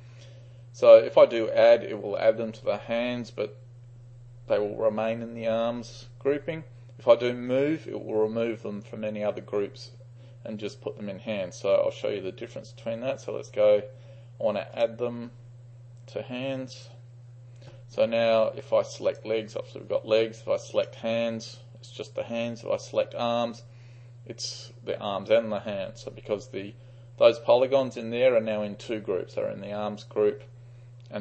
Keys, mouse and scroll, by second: 14.8-22.0 drag, 22.9-25.0 drag.